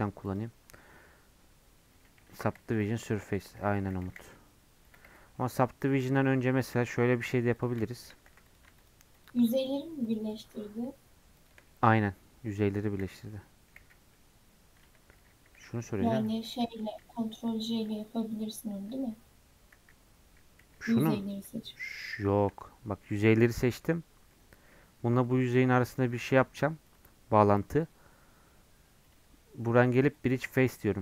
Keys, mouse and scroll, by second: 14.1-22.0 middle drag, 22.3-25.9 middle drag, 30.9-31.0 middle drag.